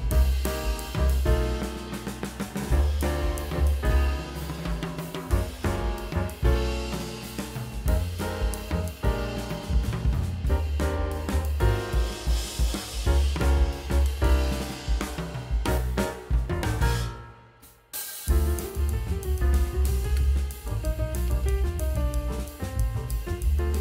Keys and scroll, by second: 0.1 ], 0.7 ctrl+alt+z, 1.5 ctrl+alt+z, 2.4 ctrl+alt+z, 3.1 space, 3.9 space, 8.7 space, 10.5 space, 12.6 space, 13.1 [, 19.3-22.5 typing, 20.4 ctrl+alt+z.